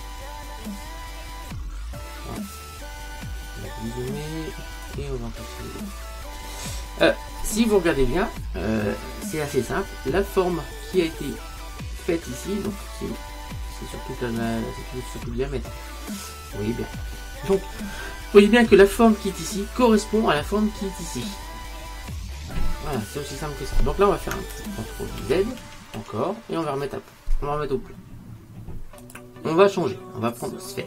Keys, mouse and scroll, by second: 3.4-4.9 scroll down 1, 4.9 click, 4.9-5.5 scroll down 1, 12.9-14.9 middle drag, 17.6 KP_1, 25.3 ctrl+z, 25.7 ctrl+z, 26.0 ctrl+z, 29.1 click.